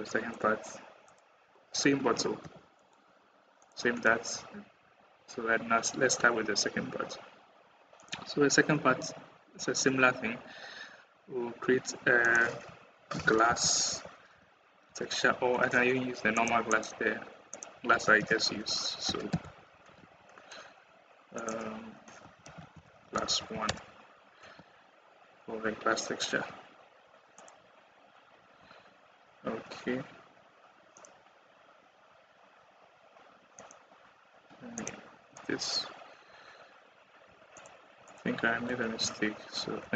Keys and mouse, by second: 2.4 g, 4.6 KP_1, 7.8 middle click, 12.0-16.5 drag, 17.3-19.9 drag, 23.0 s, 27.2 click, 28.5 Tab, 35.3 Tab, 36.2 Tab, 37.2 Tab, 37.4 click, 37.9 click, 38.8 Tab, 39.7 a.